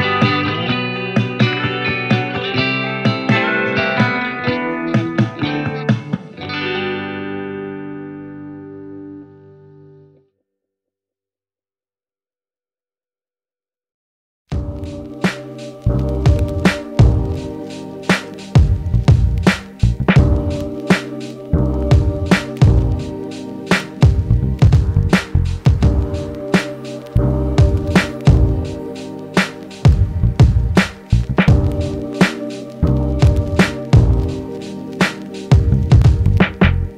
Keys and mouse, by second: 3.5 ctrl+z, 9.2 ctrl+z, 9.3 g, 10.4 ctrl+alt+z, 11.6 click, 11.7 g, 11.8 g, 11.9 f, 12.0 alt+middle click, 12.5-13.9 ctrl+drag, 12.7 ctrl+z, 12.8 ctrl+z, 13.0 ctrl+z, 13.5 ctrl+z, 13.7 f, 13.9 middle click, 13.9-16.8 drag, 14.5 ctrl+z, 14.9 ctrl+z, 15.0 ctrl+z, 16.7 f, 16.8 alt+middle click, 17.1-19.2 alt+drag, 19.1 f, 19.2 alt+middle click, 19.3-36.9 shift+drag, 21.2 ctrl+z, 23.8 g, 24.2 f, 28.7 ctrl+z, 29.1 ctrl+z, 34.0 ctrl+z, 35.8 g.